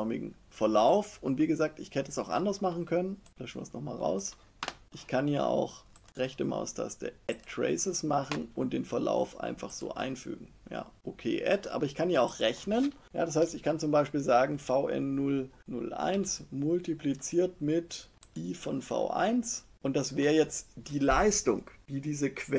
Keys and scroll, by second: 16.0 shift+=.